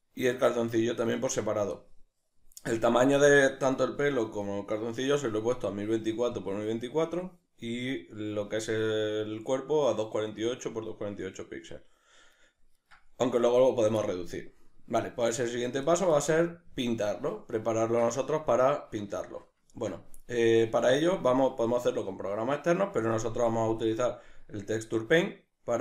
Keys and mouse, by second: 0.0 right click, 0.6-3.8 shift+middle drag, 3.8-11.8 right drag, 12.3-16.8 right drag, 17.8-25.8 shift+middle drag, 20.7 Tab.